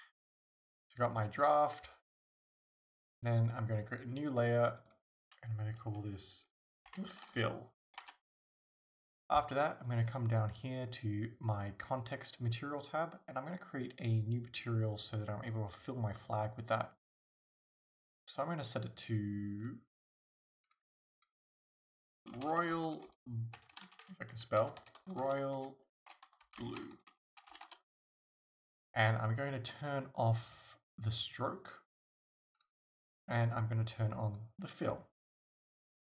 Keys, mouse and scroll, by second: 0.3 scroll up 1, 7.0-11.9 drag, 8.1 Return, 19.6 click, 20.7 click, 21.3-32.6 drag, 23.7 BackSpace, 27.8 Return, 34.3 click.